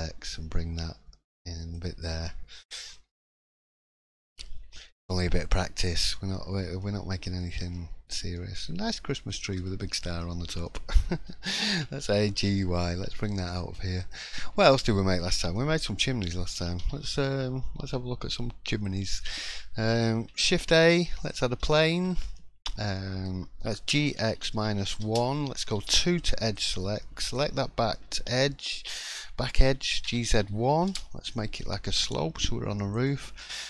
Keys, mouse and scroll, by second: 2.0 scroll down 4, 2.2 middle click, 2.9-3.5 scroll up 3, 3.4 click, 3.7-4.3 scroll down 3, 4.3 shift+middle click, 4.8 middle click, 5.4 shift+middle click, 6.3 scroll down 1, 6.4 middle click, 6.7 scroll up 1, 6.8 middle click, 7.4 shift+middle click, 7.9 scroll up 1, 8.3 shift+middle click, 9.4 middle click, 9.6 scroll down 2, 9.9 shift+middle click, 10.6 middle click, 11.0 scroll down 2, 11.7 a, 12.0 g, 14.4 shift+middle click, 14.6-15.1 scroll up 2, 15.2-15.5 scroll down 1, 15.5 middle click, 15.5-16.0 scroll down 2, 16.5 g, 19.3-19.7 scroll up 1, 20.1 scroll up 1, 20.4 shift+a, 21.7 shift+middle click, 22.0-22.7 scroll up 2, 22.3 middle click, 22.9 shift+scroll down 1, 22.9 shift+middle click, 23.7 g, 25.7 2, 26.5 click, 27.0 middle click, 27.6 shift+middle click, 30.7 g, 32.9 click, 33.3 middle click.